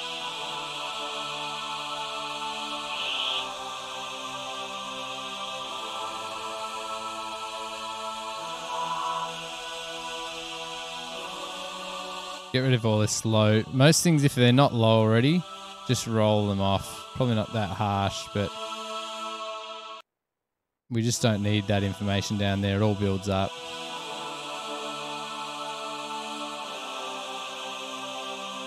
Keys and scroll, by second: 20.2 space, 20.3 space.